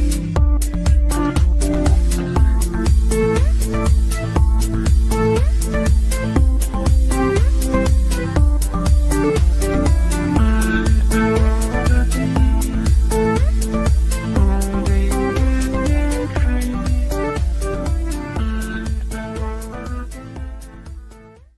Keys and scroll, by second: 6.1 w, 11.4 F9.